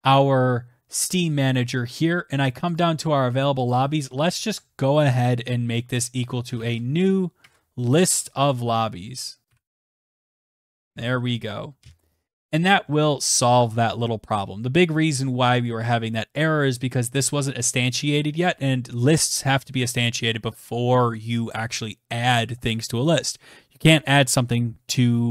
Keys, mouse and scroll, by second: 0.3 click, 2.9 click, 3.8 =, 5.5-7.8 typing, 6.7 Tab, 8.8-11.5 typing, 12.1 ctrl+s, 16.9 click.